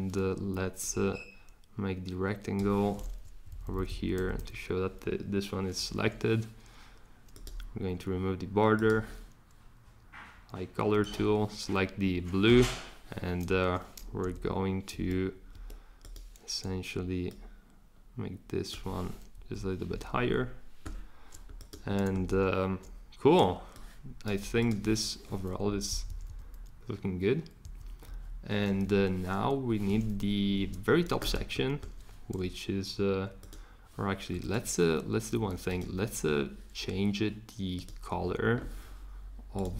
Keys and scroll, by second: 3.2 Up, 3.5 Up, 3.6 Up, 3.8 Up, 4.1 Up, 4.4 Up, 12.5 Escape, 14.2 v, 14.9 Escape, 15.5 Escape, 19.4 Up, 25.7 shift+Up, 25.9 shift+Up, 26.1 shift+Up, 26.3 shift+Up, 27.6 shift+Up, 28.1 shift+Down, 30.2 shift+Down.